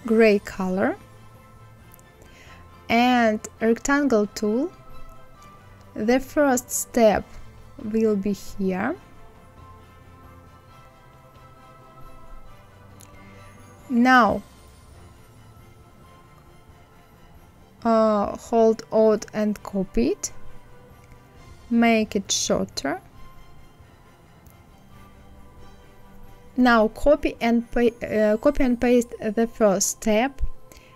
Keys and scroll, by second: 28.6 ctrl+c, 29.0 ctrl+f.